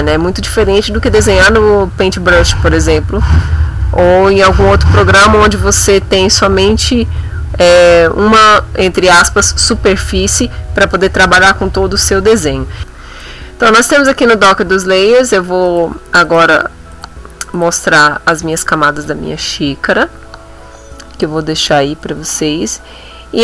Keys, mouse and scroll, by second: 12.3 click, 12.8 click, 15.7 click, 16.3 click, 17.0 click, 17.6 click.